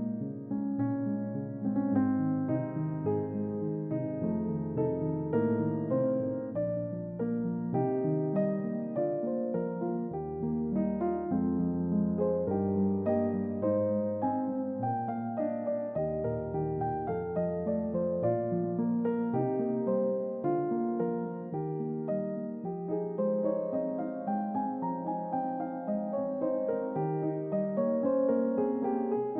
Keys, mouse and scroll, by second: 0.9 shift+middle click, 1.9 shift+middle click, 3.1 click, 4.4-5.2 typing, 5.4 Return, 6.6 click, 7.9 typing, 9.8 click, 13.3 click, 14.2 click, 15.1-16.4 middle drag, 19.9 click, 21.2 typing, 21.3 Return, 27.9 click.